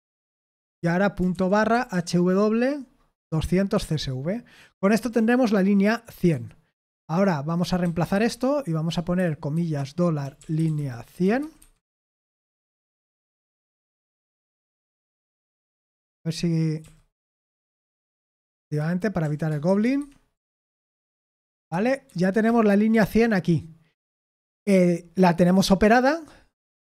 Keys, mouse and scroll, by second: 0.0-2.8 typing, 3.2 Tab, 3.7 Escape, 4.9 typing, 6.3-8.1 typing, 9.1-11.3 typing, 11.5 Escape, 12.5 typing, 13.5-14.4 typing, 15.6-22.9 typing, 19.9 Escape, 22.0 Escape.